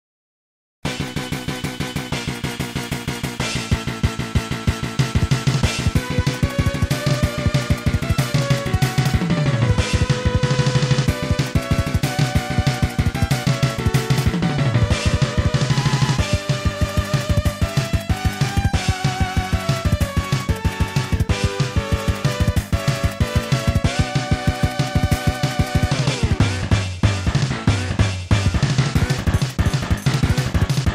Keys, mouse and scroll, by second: 4.4 i, 6.6 click, 10.7 ctrl+z, 11.6-12.3 typing, 12.9 Return, 14.0-14.6 typing, 15.2 Return, 15.5 ctrl+z, 16.2-17.0 typing, 17.7 Return, 18.2 ctrl+z, 19.0 Tab, 19.4 click, 19.8 ctrl+a, 21.0 click, 21.6 Tab, 22.0 click, 22.9-23.8 typing, 25.6 Return, 28.5 click, 29.8 w.